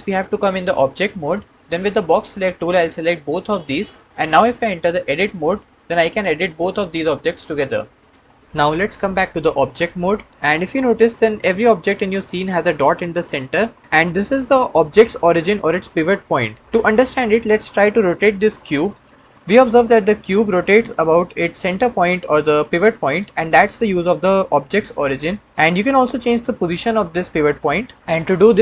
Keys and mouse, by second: 2.7-3.7 drag, 5.0 Tab, 6.9 click, 7.5 click, 7.9 click, 10.3 Tab, 11.2 click, 13.2 click, 16.9-17.8 middle drag, 18.4 click, 19.0 r.